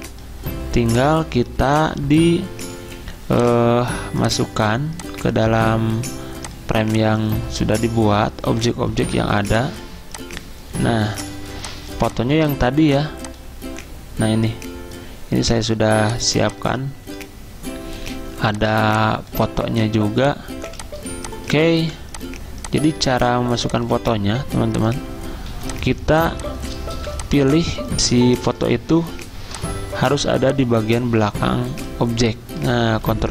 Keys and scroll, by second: 2.8 Escape, 9.0 ctrl+2, 11.3 z, 20.6 z, 21.8 v, 24.2 ctrl+z, 25.3-26.7 typing, 33.0 ctrl+[, 33.2 ctrl+[.